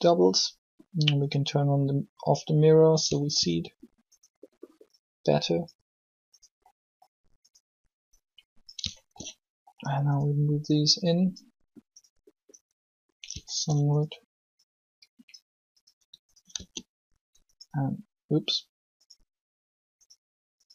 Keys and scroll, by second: 16.5 shift+s.